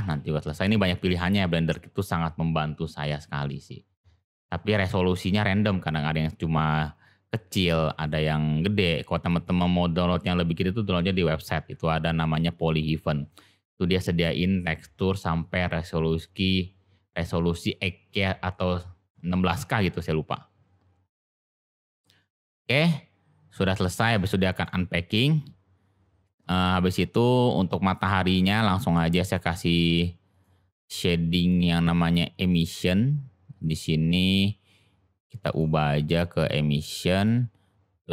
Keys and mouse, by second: 24.2 middle click, 28.0 click, 30.3 click, 31.3 click, 35.4-37.2 drag.